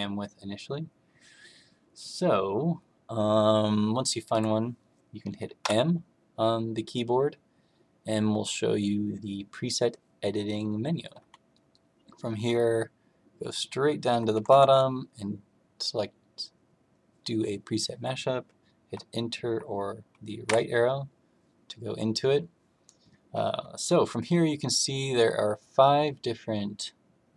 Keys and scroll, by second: 5.5 m, 13.4 Down, 14.3 Down, 14.4 Down, 20.4 Right.